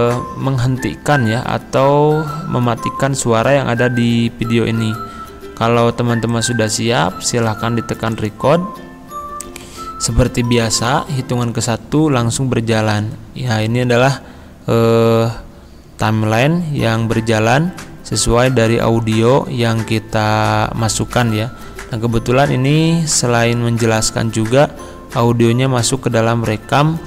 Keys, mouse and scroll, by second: 6.3 click.